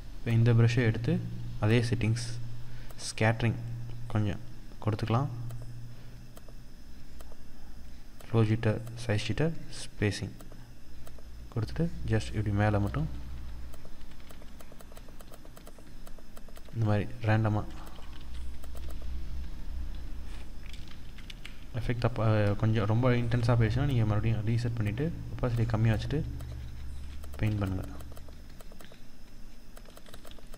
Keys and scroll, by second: 17.6 ctrl+=, 20.3 ctrl+z, 26.9 ctrl+-.